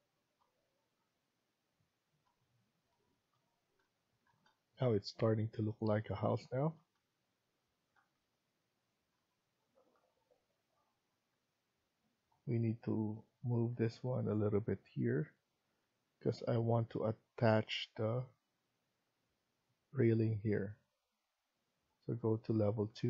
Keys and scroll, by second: 15.5 Escape, 15.8 Escape.